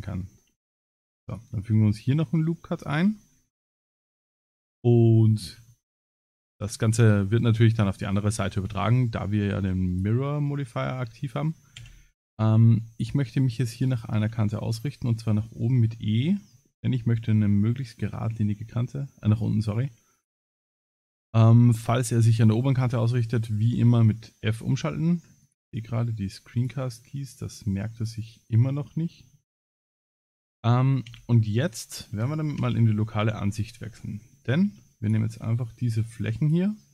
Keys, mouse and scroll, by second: 28.0 click, 29.0 middle click, 29.7 middle click, 31.1 3, 32.6 KP_Divide, 33.5 middle click, 34.5 3, 35.0 click, 35.4 middle click, 36.4 ctrl+click.